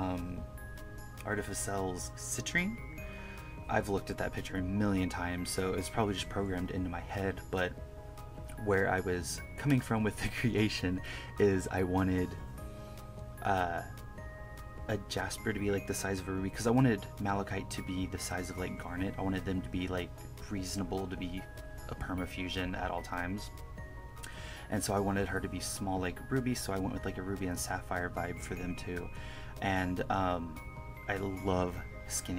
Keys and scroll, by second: 0.0 KP_Subtract, 0.3 KP_Add, 0.7 1, 1.1 KP_Subtract, 1.7 1, 1.9 1, 2.1 1, 2.9 KP_Subtract, 3.3 1, 3.7 1, 4.1 1, 4.5 KP_Add, 5.1 KP_Subtract, 5.2 1, 5.9 KP_Add, 6.3 KP_Subtract, 6.8 1, 7.6 1, 8.4 KP_Add, 8.9 1, 9.3 1, 9.8 KP_Subtract, 9.9 1, 10.6 KP_Subtract, 11.2 1, 11.8 1, 11.9 1, 12.5 KP_Add, 12.8 1, 14.0 KP_Add, 14.4-17.7 typing, 15.6 KP_Subtract, 17.0 KP_Subtract, 19.0 1, 19.2 KP_Add, 19.5 KP_Subtract, 19.7 1, 20.3 KP_Subtract, 20.5 KP_Add, 20.8 1, 21.5 1, 23.0 KP_Subtract, 24.6 1, 24.9 1, 25.8 1, 28.3 1, 28.7 1, 30.0 1, 30.3 1, 31.5 1, 31.9 KP_Add.